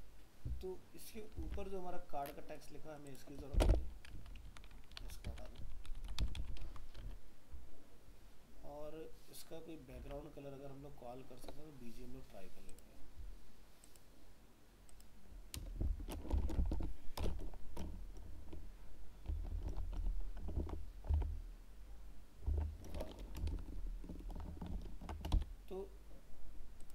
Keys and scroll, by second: 1.4 alt+Tab, 6.6 ctrl+s, 7.1 alt+Tab, 20.6 ctrl+s, 21.1 alt+Tab, 23.5 ctrl+shift+Left, 24.7 ctrl+shift+Right.